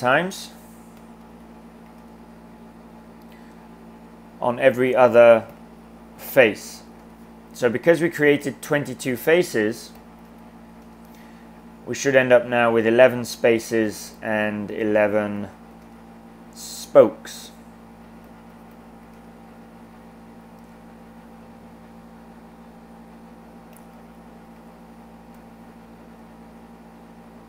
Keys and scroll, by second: 0.7-2.3 typing, 5.5-7.3 typing, 9.8-11.1 typing, 14.2-16.2 typing, 18.0-19.5 typing, 23.5-24.9 typing.